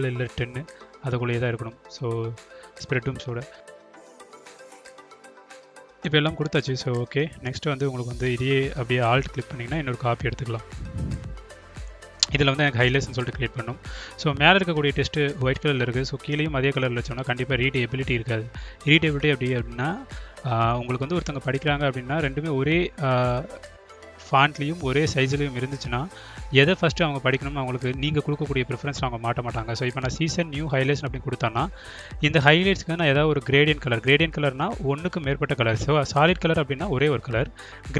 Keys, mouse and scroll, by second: 0.9-3.4 drag, 4.2-5.6 drag, 6.4-7.4 drag, 8.0-9.0 alt+drag, 9.8 click, 10.0 click, 11.0 click, 11.3 click, 13.3 shift+g, 14.4-16.5 typing, 17.6 shift+1, 19.3 ctrl+a, 20.6-21.5 drag, 22.4 click, 23.0-25.4 drag, 27.2-28.3 drag, 28.8 click, 30.0-31.7 drag, 32.8-33.8 drag, 34.1-36.6 drag.